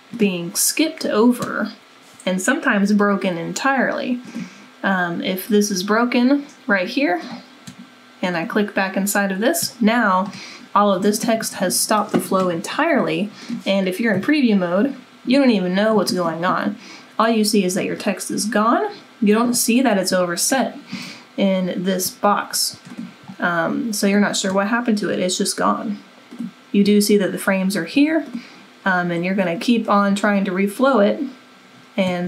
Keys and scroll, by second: 14.1 w.